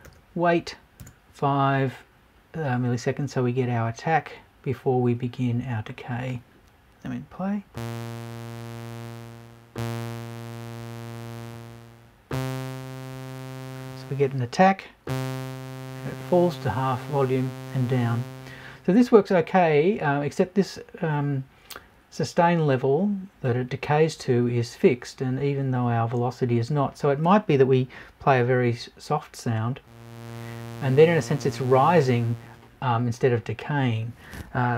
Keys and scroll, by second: 1.0 BackSpace.